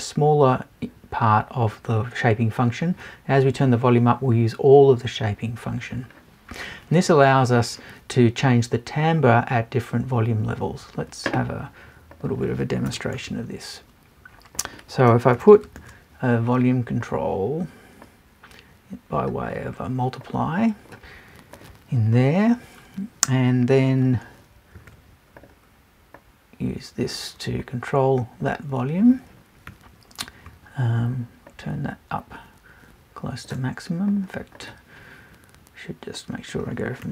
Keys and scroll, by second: 12.9 BackSpace.